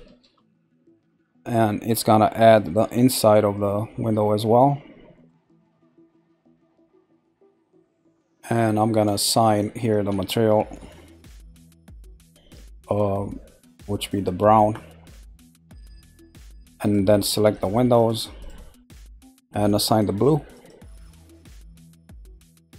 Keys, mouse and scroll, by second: 1.6-3.8 scroll, 4.5 middle click, 5.4-5.8 scroll up 1, 5.9-6.4 scroll up 1, 6.4-9.4 middle drag, 11.3 click, 13.9 click, 15.5 click, 16.8 click, 17.5 shift+click, 17.9 shift+click, 18.4 shift+click, 20.5 click, 21.5 click.